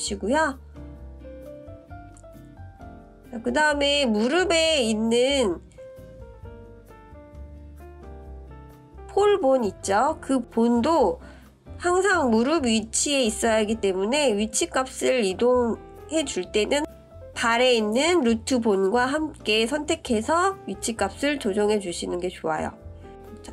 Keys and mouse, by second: 4.1-4.4 drag, 5.2-10.2 drag, 11.6-12.2 middle drag, 13.7 shift+click, 15.9 click, 16.4-17.0 middle drag, 18.5 KP_1, 19.7-20.2 shift+drag, 20.2 middle click, 21.5-23.5 middle drag.